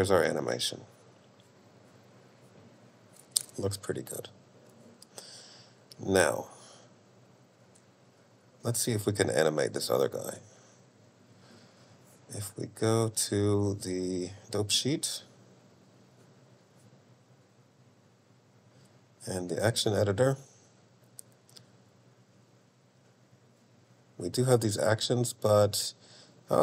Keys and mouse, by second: 14.8 click, 16.0 click, 17.5-19.3 drag, 20.8-23.1 drag, 24.4 click.